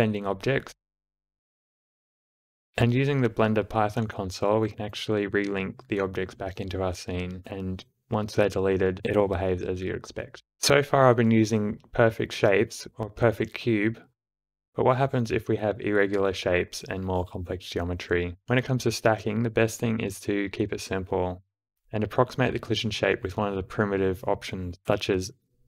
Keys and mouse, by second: 0.1-0.7 right drag, 1.0 space, 2.6 ctrl+v, 3.6 Return, 5.1 shift+0, 5.4 click, 9.1 space, 11.2 middle click, 12.1-13.6 drag, 17.3 d, 17.8-21.8 drag, 21.8 space.